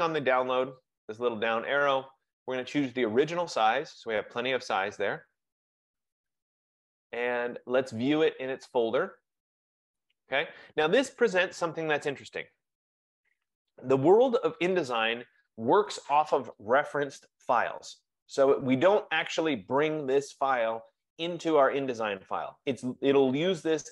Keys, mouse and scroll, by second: 1.0 click, 3.6 click, 7.5 F15, 8.2 click, 10.1 click.